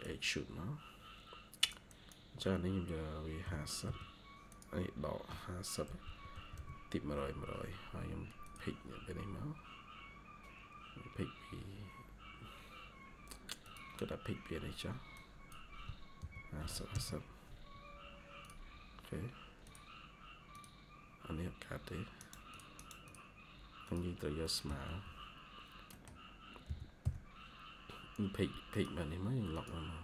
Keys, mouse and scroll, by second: 1.8 double click, 3.3-3.7 typing, 6.0-6.7 typing, 9.0 scroll up 1, 9.3 typing, 11.2 scroll up 1, 11.5 typing, 16.8 Return, 18.7-19.7 scroll up 1, 22.1 right click, 24.3-25.3 typing, 24.3 middle click, 25.8 middle click, 26.5-26.9 typing.